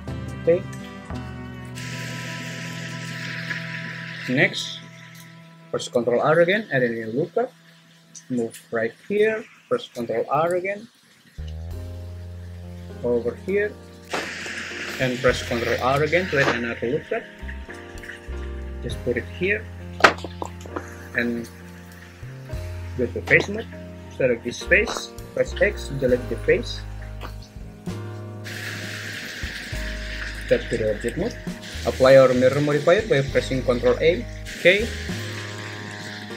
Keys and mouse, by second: 1.7 Tab, 2.7 Tab, 3.3 `, 5.7 ctrl+r, 8.8-15.7 drag, 15.8 ctrl+r, 20.2 Escape, 23.3 3, 24.6 click, 25.3 x, 30.3 Tab, 34.4 ctrl+a, 34.4 `, 36.0 `.